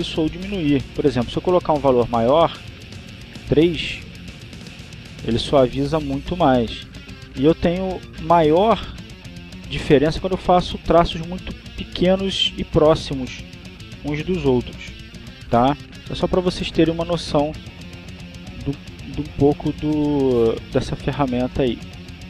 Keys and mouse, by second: 2.6-5.1 drag, 5.3-6.3 drag, 7.0 ctrl+z, 7.3-8.5 ctrl+drag, 8.5 ctrl+z, 8.8 ctrl+click, 10.1 ctrl+z, 10.5 ctrl+click, 11.9 ctrl+z, 12.1-13.6 ctrl+drag, 13.7 ctrl+z, 14.2-15.6 ctrl+drag, 16.1 ctrl+z, 17.5-19.0 drag, 19.3 click, 21.2 click.